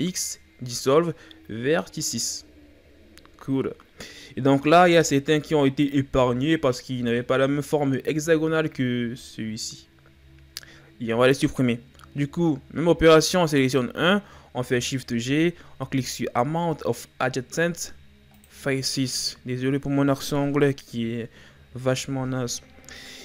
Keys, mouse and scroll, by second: 12.0-13.7 shift+scroll up 2, 13.7 right click, 15.1 shift+g, 22.2-22.5 shift+scroll down 2.